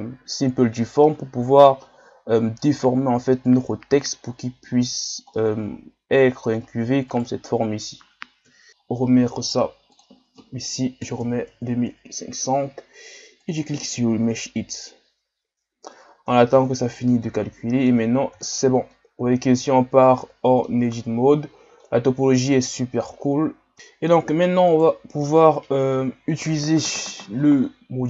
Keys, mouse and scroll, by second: 1.0-2.6 middle drag, 2.6-5.4 drag, 5.4-7.1 middle drag, 7.1-8.5 right drag, 8.5 KP_1, 8.7-9.9 middle drag, 9.9-11.6 drag, 11.6 KP_0, 13.4-16.4 drag, 17.2-18.1 middle drag, 18.1 scroll up 1, 18.4 Tab, 18.9-21.3 middle drag, 21.3-21.9 scroll up 1, 21.9-23.2 middle drag, 23.2-23.7 scroll up 1, 23.7 Tab, 24.1 a, 24.7-26.5 right drag, 26.5 scroll up 2.